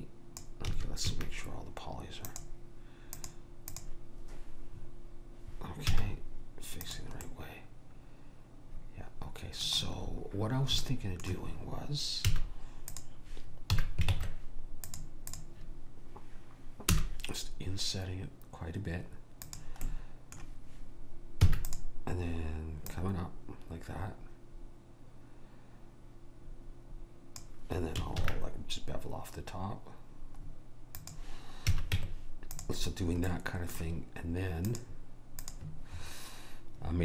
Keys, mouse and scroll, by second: 0.8 a, 1.2 a, 3.9 click, 5.9 z, 7.4-9.2 middle drag, 10.1-12.3 middle drag, 12.3 a, 13.0 click, 13.8 a, 14.2 ctrl+Tab, 15.4 click, 17.0 i, 19.9 click, 20.3-21.8 middle drag, 21.6 e, 23.0 click, 28.3 ctrl+b, 31.8 a, 32.0 Tab, 33.6-34.7 middle drag, 34.7-37.0 drag.